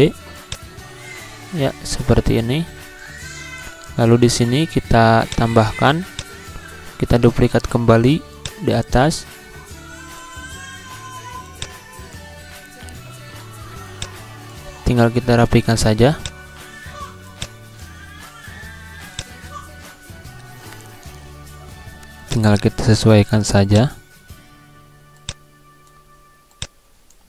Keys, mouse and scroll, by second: 0.4 click, 0.5-7.0 drag, 7.0 ctrl+z, 7.5 ctrl+d, 8.4-12.8 drag, 12.8 z, 13.9-19.1 drag, 20.3 Insert, 22.2-27.2 drag.